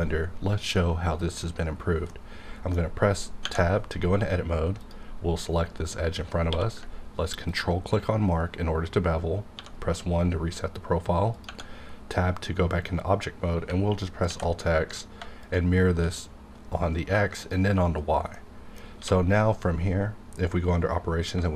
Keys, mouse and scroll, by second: 2.1-3.4 middle drag, 4.7 click, 6.5 q, 7.5 ctrl+click, 8.2 scroll up 1, 9.5 1, 11.3 click, 11.4 Tab, 14.3 alt+x, 15.4 shift+click, 17.4 click, 18.3 middle click, 18.7 scroll down 1, 18.9 q.